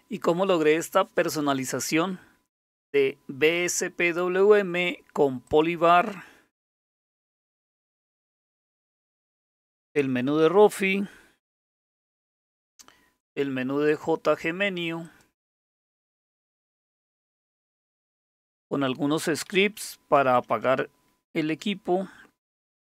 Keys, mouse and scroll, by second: 5.5 click, 7.8 alt+super+d, 9.2 Down, 9.3 Down, 9.5-14.6 Down, 9.8 Up, 10.0 Up, 10.2-14.6 Up, 11.4 Escape, 13.9 click, 14.6 click, 14.9 click, 15.1 click, 15.6 click, 17.6 shift+super+x, 19.5 Down, 19.7 Down, 20.0 Down, 20.2 Up, 20.4 Up, 20.5 Up, 21.6 Escape.